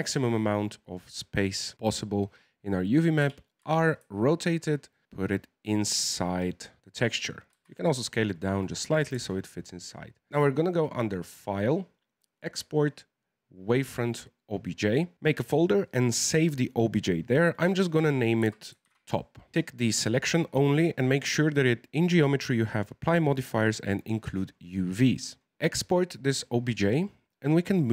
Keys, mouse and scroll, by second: 3.2 r, 5.0 g, 7.5 s, 9.2 Tab, 10.3 click.